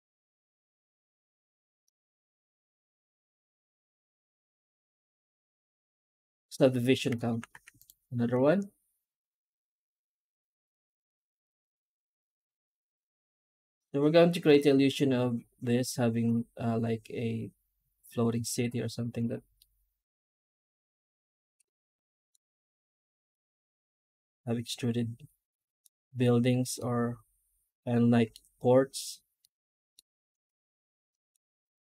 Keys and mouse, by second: 1.7-6.4 middle drag, 19.4-22.2 middle drag, 23.2-25.7 middle drag, 26.7-28.2 middle drag, 29.3 middle drag, 29.6 middle drag, 30.4 ctrl+s, 31.0 middle drag, 31.5 right click, 31.7 Tab.